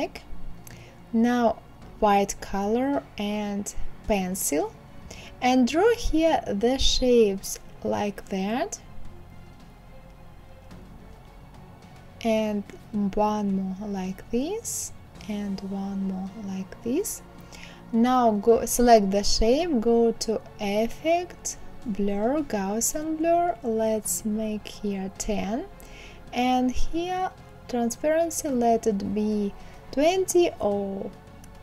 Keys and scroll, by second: 26.5 KP_1, 26.8 KP_5, 27.0 Return.